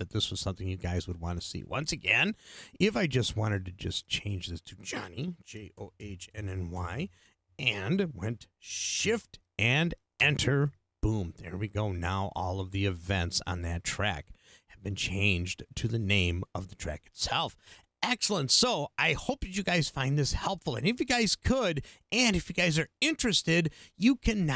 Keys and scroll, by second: 5.3-7.2 typing, 10.2 shift+Return.